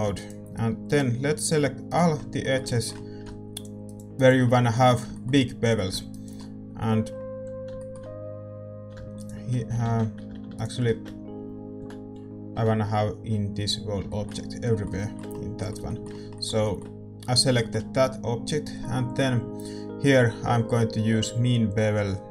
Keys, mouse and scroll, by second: 0.1-2.1 middle drag, 0.1-12.5 right drag, 2.4-10.5 middle drag, 9.8 ctrl+z, 11.7 a, 12.5 l, 13.7-22.3 middle drag.